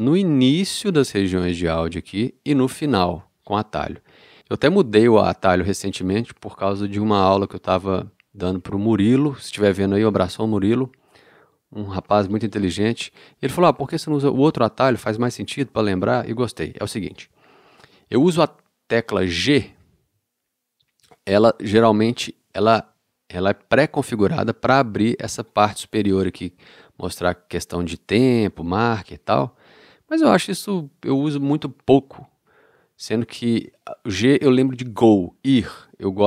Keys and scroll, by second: 19.6 g, 21.7 g, 24.7 g, 29.6 g.